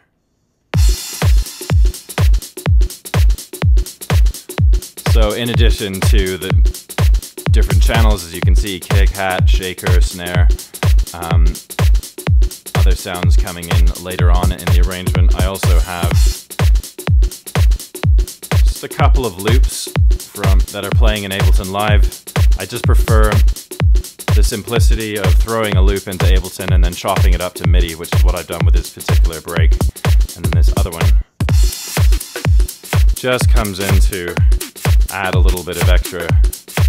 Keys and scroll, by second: 16.0 super+Tab, 35.2 super+Right.